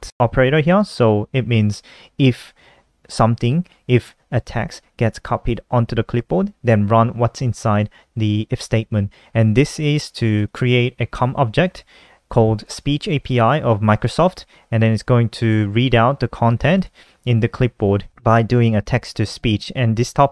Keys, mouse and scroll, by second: 7.3 click, 9.9 click, 12.1 click, 16.1 click, 16.2 click.